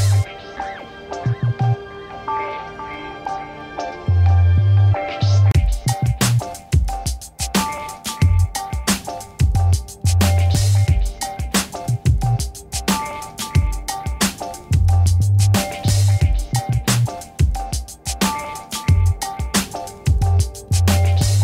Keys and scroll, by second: 1.0 ctrl+-, 2.9 a, 20.9 a.